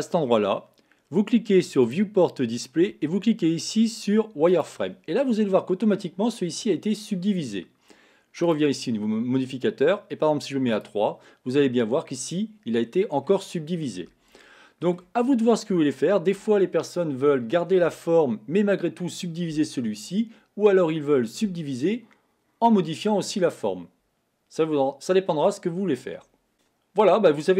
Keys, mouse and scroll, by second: 0.0 click, 2.1-4.8 drag, 5.5-6.5 middle drag, 6.5-8.6 scroll up 3, 8.6 click, 10.9 click, 11.8-13.4 middle drag, 13.4-14.0 scroll up 1, 14.0-14.6 scroll up 1, 14.6-15.4 shift+middle drag, 15.4-15.9 scroll down 2, 15.9-19.1 shift+middle drag.